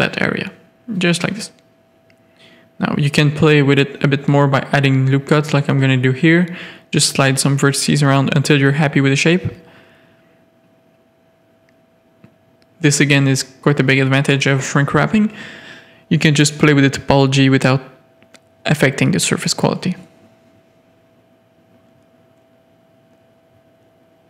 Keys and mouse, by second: 0.0-0.3 typing, 1.7 Tab, 1.8 middle click, 2.1 1, 3.6 middle drag, 4.2 ctrl+r, 6.0 click, 6.6 click, 8.0 g, 9.4 middle click, 10.0 click, 10.6 g, 12.3 click, 13.0 g, 13.3 click, 14.0 g, 14.9 click, 15.9 g, 16.5 click, 16.6 g, 18.2 middle click, 18.5 alt+Tab, 18.6 alt+a, 19.0-19.8 middle drag, 19.8 z, 20.6 middle click, 20.9 Tab, 22.2 click.